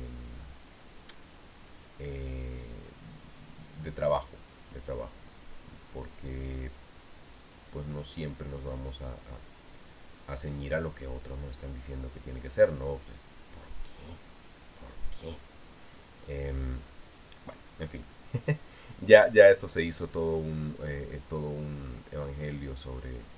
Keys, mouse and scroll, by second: 10.6 click, 17.0 click.